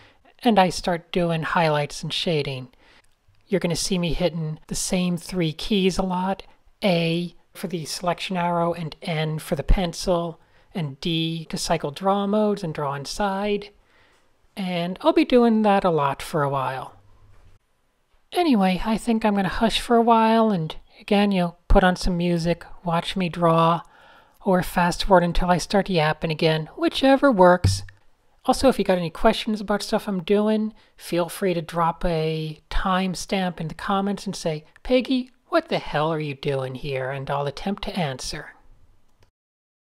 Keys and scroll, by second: 0.4 Tab, 2.0 Tab, 2.4 Tab, 2.7 v, 3.4 shift+super+{, 4.1 shift+super+a, 5.3 n, 6.4 super+1, 7.2 super+space, 7.3 Tab, 8.0 Tab, 8.1 Tab, 8.5 n, 9.1 super+z, 11.0 Tab, 11.7-13.3 typing, 15.4 Tab, 15.6 Tab, 15.8 d, 16.4 super+z, 18.3 super+z, 18.8 super+z, 19.9 Tab, 20.1 Tab, 22.8 a, 24.9-26.9 typing, 27.0 shift+super+a, 28.6 a, 29.5 Tab, 29.7 Tab, 30.3-33.6 typing, 34.6 super+z, 36.2-36.7 typing, 38.9 a.